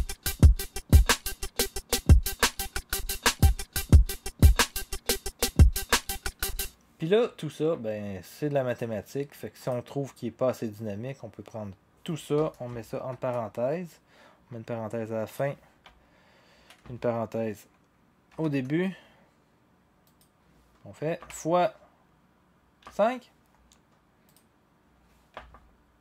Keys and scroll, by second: 6.5 0, 15.8-16.6 Left, 18.3 (, 21.2 *, 22.8 5, 25.3 0.